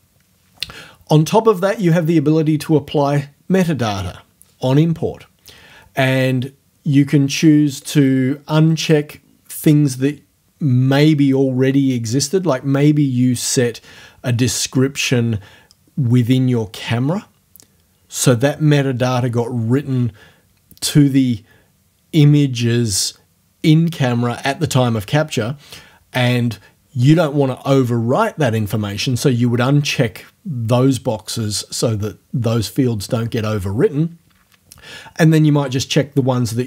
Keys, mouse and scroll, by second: 7.8 click, 8.8 click.